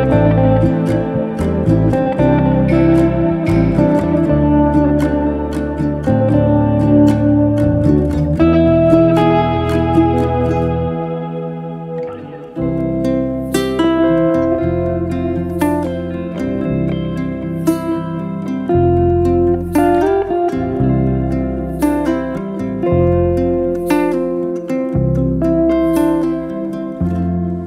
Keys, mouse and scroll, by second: 0.3 alt+h, 0.9-1.4 middle drag, 1.4 click, 2.0 3, 2.2 click, 2.8 Delete, 3.7 middle click, 4.4 alt+z, 4.8-5.8 middle drag, 5.8 click, 7.3 Delete, 8.0 middle drag, 8.3 click, 8.6 Delete, 9.7 2, 10.5 alt+z, 11.2 click, 11.9 2, 12.2 click, 12.7 alt+click, 13.4 f, 13.8-14.8 middle drag, 14.8 Tab, 15.2 middle click, 16.0 KP_7, 16.4 scroll up 2, 16.7-17.5 shift+middle drag, 17.5 r, 19.8-21.3 middle drag, 22.2 Tab, 22.4-23.1 scroll up 2, 23.1 click, 24.3 g, 25.6 g, 25.7-27.2 middle drag, 27.3 click.